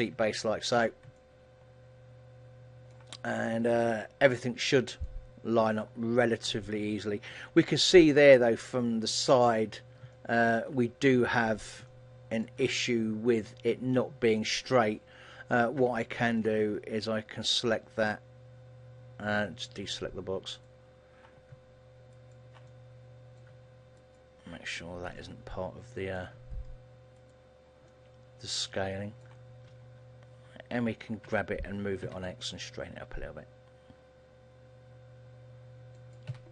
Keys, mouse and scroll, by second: 0.3 Tab, 0.9 a, 1.3 middle click, 3.9 KP_1, 4.8-5.5 scroll up 2, 5.1 shift+middle click, 9.5 Tab, 10.3 shift+middle click, 11.2-11.7 scroll up 2, 12.0 shift+middle click, 36.2 click, 36.4 a.